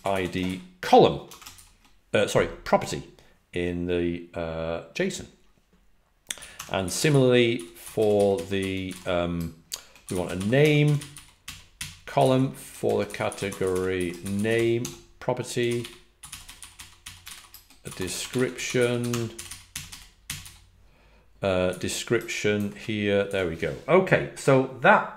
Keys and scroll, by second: 0.0-0.5 typing, 6.5-21.6 typing.